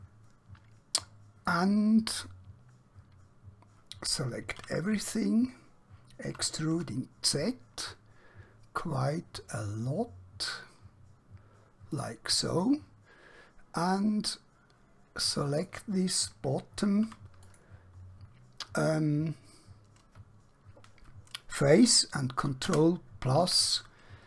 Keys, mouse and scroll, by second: 4.5 typing, 8.6 typing, 12.0 click, 12.6 middle click, 17.2 3, 17.4 click, 18.8-19.2 scroll down 1, 22.1 ctrl+Num_Lock, 22.6 ctrl+KP_Add.